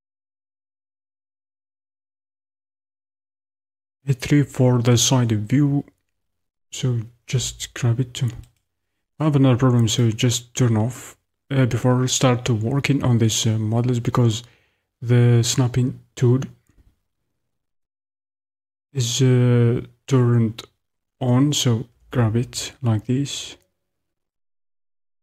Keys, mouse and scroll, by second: 0.6-8.8 drag, 3.6 KP_3, 7.3 g, 10.1 click, 21.9 g.